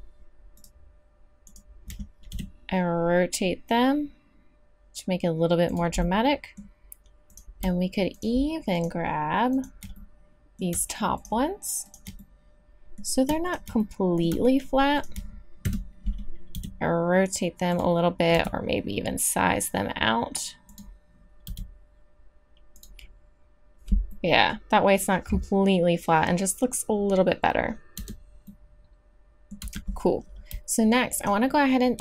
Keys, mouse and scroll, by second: 2.3 r, 6.1-7.3 scroll up 1, 7.9 click, 10.0 middle click, 11.2 middle click, 15.6 KP_3, 16.5 r, 18.3 s, 21.4 r, 28.0 Tab, 29.6 Tab.